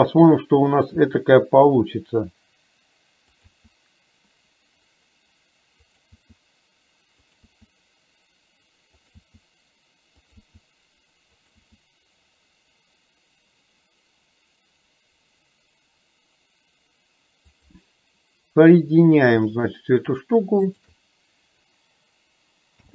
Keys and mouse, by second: 1.0 e, 7.6 e, 9.4 e, 20.9 shift+click, 22.8 m.